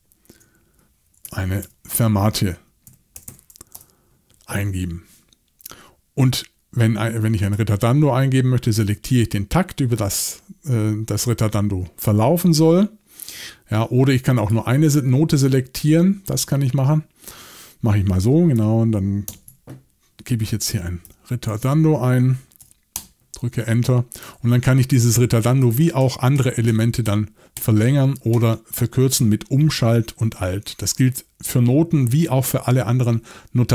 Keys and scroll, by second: 0.0-3.8 typing, 19.3 shift+t, 20.4-22.6 typing, 22.9 Return, 25.6 alt+shift+Right, 26.0 alt+shift+Right, 26.3 alt+shift+Right, 26.7 alt+shift+Right, 27.0 alt+shift+Right, 27.5 alt+shift+Right, 28.3 alt+shift+Right.